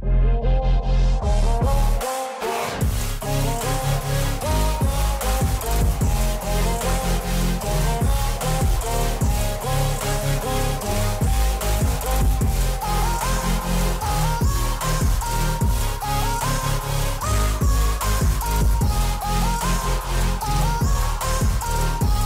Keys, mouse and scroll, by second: 0.8 alt+scroll up 1, 1.7 click, 5.1 scroll up 1, 5.5 alt+scroll down 1, 5.9 alt+scroll up 1, 6.3 scroll down 1, 8.0-8.3 scroll up 2, 9.5-9.9 scroll up 1, 11.3-11.6 scroll down 2, 13.8 click, 17.1 space, 17.1 click, 18.0 right click, 18.4 click, 18.7 scroll up 1, 20.2-22.0 drag, 22.0-22.2 drag.